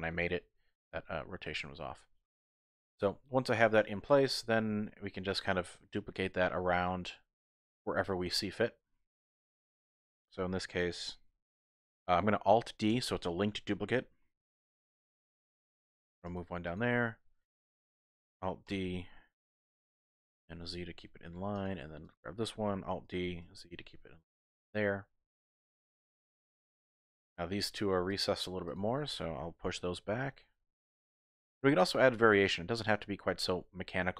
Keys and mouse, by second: 3.0 KP_1, 4.8 shift+middle click, 4.9 shift+click, 5.0 shift+middle click, 5.1 shift+click, 12.9 alt+d, 14.6 g, 14.6 x, 16.2 click, 16.7 click, 16.8 typing, 18.7 alt+d, 20.4 z, 21.5 click, 22.1 click, 23.1 alt+d, 23.4 z, 24.6 click, 25.1-26.4 middle drag, 27.0 middle click, 28.6 shift+click, 30.0 g, 30.1 y, 31.3 click, 31.9-34.1 middle drag.